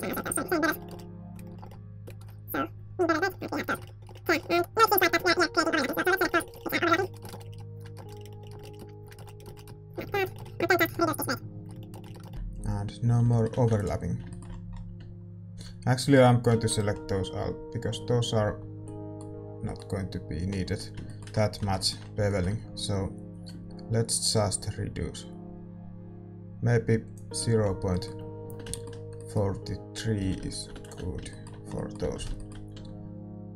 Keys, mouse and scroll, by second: 0.0-2.0 typing, 2.8 click, 3.2 Tab, 3.6 a, 3.8 ctrl+s, 4.6 Tab, 4.7 a, 4.9-5.9 middle drag, 4.9 right click, 5.3 Tab, 5.6 Tab, 5.7 a, 5.9-7.4 right drag, 6.0-10.1 middle drag, 7.2 ctrl+z, 7.7 right click, 9.0-10.9 right drag, 10.1 click, 10.4-11.4 middle drag, 10.9 click, 11.7 middle click, 12.1 Tab, 12.3-14.2 middle drag, 14.2 ctrl+s, 15.0 Tab, 15.5 a, 16.5 l, 16.6-17.8 middle drag, 17.8 l, 18.4 l, 18.8-23.6 middle drag, 20.4 l, 23.6-25.6 drag, 27.6 middle click, 28.4 Tab, 30.1 a, 30.3 a, 31.0 ctrl+s, 32.0 Tab, 32.7 a.